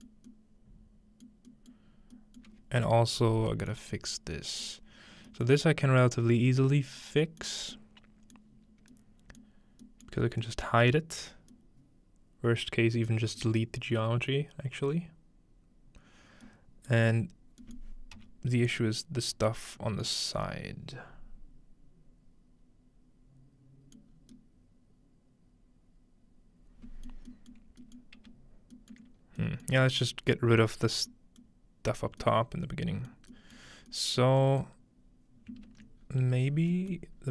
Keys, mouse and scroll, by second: 2.0-3.5 scroll up 2, 3.8-4.3 middle drag, 4.6-5.3 middle drag, 5.5-7.0 middle drag, 6.8-8.3 scroll down 1, 7.5 middle click, 8.7-10.4 scroll up 2, 11.3 scroll down 2, 11.4-13.1 middle drag, 13.4-15.2 middle drag, 16.3 scroll down 2, 16.5 middle click, 17.6 middle click, 17.7-18.0 scroll down 1, 18.2 middle click, 18.2 typing, 20.2 middle click, 20.2 scroll up 1, 24.1 middle click, 24.1 scroll down 1, 27.2 middle click, 27.7 middle click, 28.0-29.3 middle drag, 29.2-30.6 scroll up 1, 34.2 middle click, 34.7-36.1 middle drag, 36.0-36.7 scroll down 1, 36.7 scroll up 1, 37.2-37.3 scroll down 3.